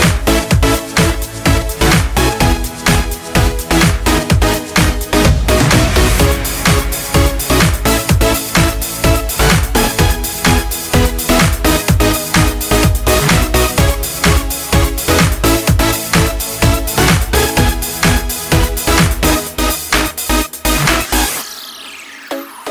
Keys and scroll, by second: 5.9 ctrl+j, 10.7 ctrl+space, 13.3 ctrl+space.